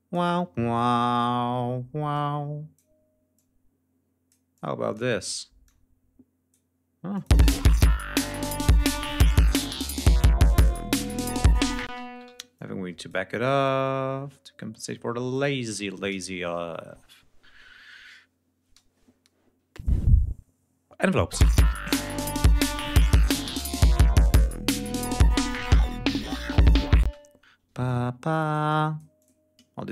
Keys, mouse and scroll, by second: 2.0 click, 3.2 click, 4.4 click, 5.5 click, 7.0 click, 7.2 space, 8.0 g, 8.2 ctrl+scroll down 2, 9.2 ctrl+scroll up 2, 11.7 space, 11.9 ctrl+scroll up 2, 12.1 ctrl+e, 12.4 ctrl+click, 13.5-14.9 drag, 15.2 click, 21.2 space, 26.1 ctrl+scroll down 2, 26.8 space, 27.4 ctrl+e, 27.7-29.3 ctrl+drag.